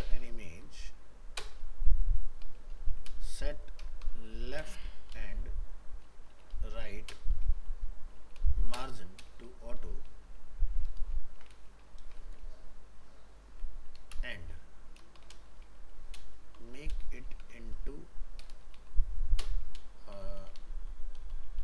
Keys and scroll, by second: 11.0 ctrl+shift+Left, 11.2 ctrl+x.